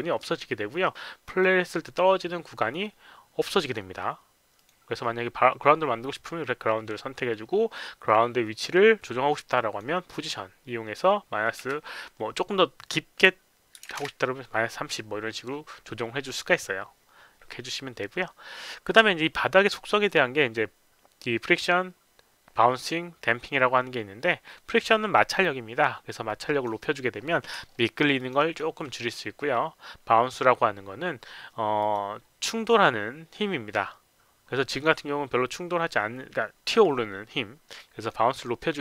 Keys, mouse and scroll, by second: 1.2 click, 3.7 click, 4.6 click, 6.1 click, 9.5 click, 11.6 KP_Subtract, 13.8 KP_Subtract, 13.8 KP_3, 13.9 KP_0, 24.3 middle click, 26.3 click, 27.8 alt+middle click, 28.2 alt+click, 28.4 alt+right click, 31.8 click, 34.7 click, 37.8 click.